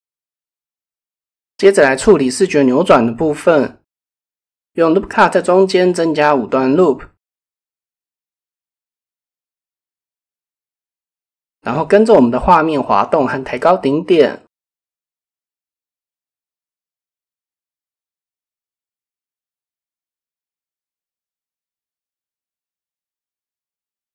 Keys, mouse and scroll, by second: 1.7 ctrl+r, 2.7 typing, 8.0 middle click, 8.3 typing, 9.3 middle click, 10.6 middle click, 13.1 g, 13.8 middle click, 14.6 middle click, 16.6 middle click, 17.3 KP_7, 18.3 g, 18.5 g, 21.5 click, 21.9 middle click, 24.0 middle click.